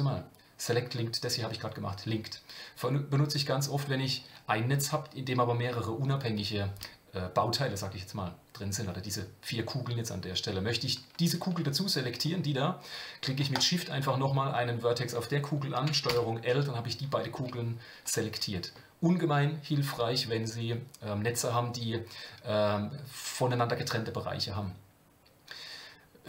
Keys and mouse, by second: 16.1 ctrl+l, 17.2 g.